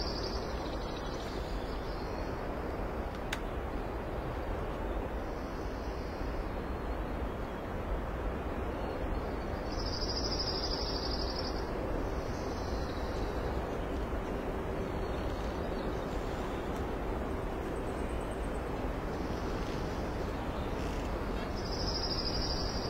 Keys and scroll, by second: 5.9 alt+space, 17.2 ctrl+z, 21.7 ctrl+c, 22.2 ctrl+v.